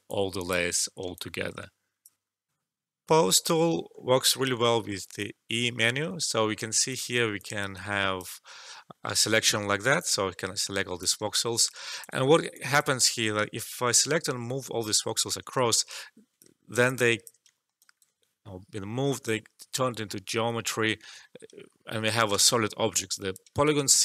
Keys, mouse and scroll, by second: 0.0 alt+click, 1.1-2.4 alt+drag, 2.4 alt+F12, 3.9 alt+middle click, 4.4 e, 5.1 e, 6.9-9.8 drag, 9.9-11.3 drag, 11.3 alt+click, 12.2 alt+middle click, 12.5 alt+click, 14.1 Return, 15.7 alt+click, 16.5 alt+middle click, 16.8 alt+click, 17.5 alt+shift+middle click, 17.7 alt+right click, 21.6 alt+right click, 21.8 alt+middle click, 22.4 alt+click, 23.5 alt+middle click.